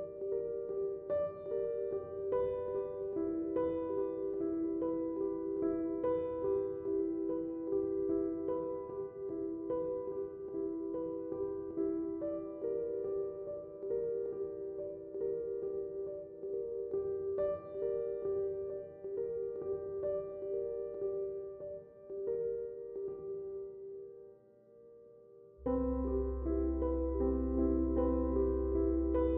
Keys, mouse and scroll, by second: 6.8 click, 6.8 typing, 10.0 click, 15.6 click, 17.5 typing, 18.0 click, 24.3-26.4 drag.